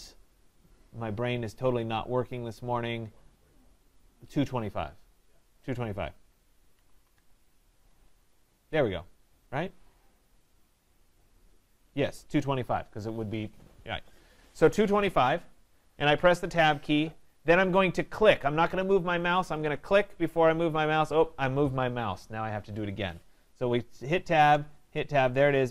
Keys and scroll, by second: 7.8 Tab, 23.6 Tab.